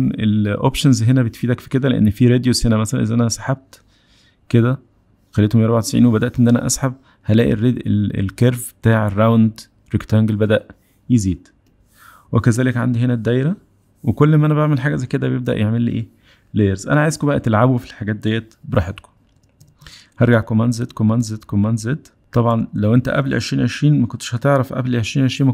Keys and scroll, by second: 19.2 super+z, 20.5 super+z, 21.0 super+z, 21.5 super+z, 22.0 super+z, 22.5 super+z, 23.0 super+z.